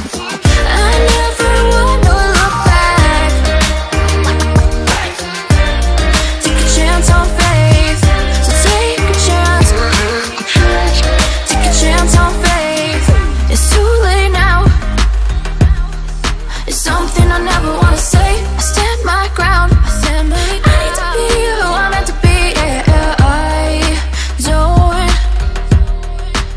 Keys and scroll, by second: 0.7 ctrl+z, 1.3 ctrl+z, 12.3 ctrl+x, 17.5 ctrl+c, 19.8 Delete, 20.6 ctrl+v, 24.8 Right, 25.2 Right, 25.3 Up, 25.7 Right.